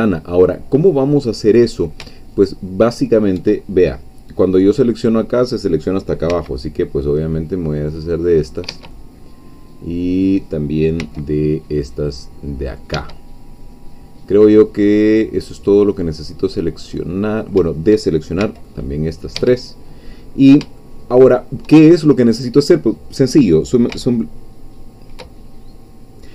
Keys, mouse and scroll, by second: 2.4 alt+shift+click, 4.0 scroll down 2, 6.3 c, 6.7-8.7 drag, 8.7 Escape, 8.9-10.3 drag, 11.0 c, 11.1-12.9 middle drag, 12.9 Escape, 13.1-17.0 middle drag, 17.2-17.5 scroll up 1, 17.7 shift+middle click, 18.4 shift+c, 18.7 middle click, 19.4 Escape, 20.3-20.6 scroll up 1, 20.9 shift+middle click.